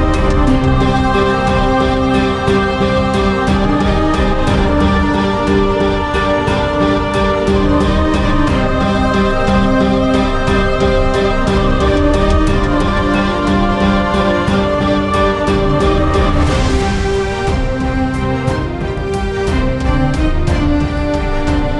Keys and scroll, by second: 2.7-4.5 typing, 4.7 Return, 5.8 typing, 7.5-8.4 typing, 14.0-14.9 typing.